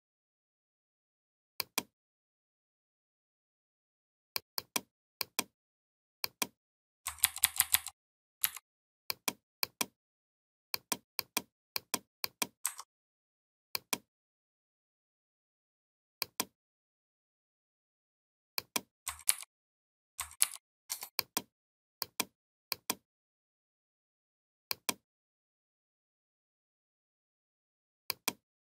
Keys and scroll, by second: 7.0 ctrl+[, 8.2 v, 19.1 ctrl+g, 20.3 ctrl+g.